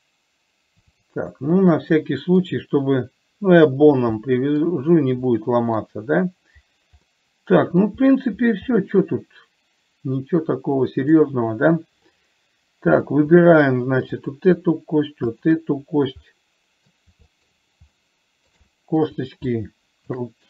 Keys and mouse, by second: 2.4 middle click, 4.6 middle click, 5.7 middle click, 7.4 middle click, 9.1-11.5 middle drag, 12.5-13.5 middle drag, 14.6 click, 16.5 middle click, 17.6 shift+middle click, 18.4 shift+middle click, 19.1 middle click, 19.7 shift+click.